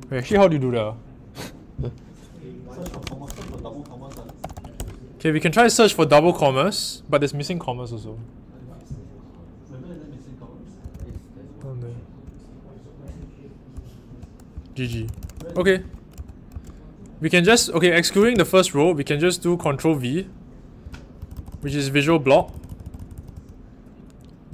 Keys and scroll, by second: 2.5-5.2 typing, 10.8-12.0 typing, 13.0-17.4 typing, 18.1 ctrl+v.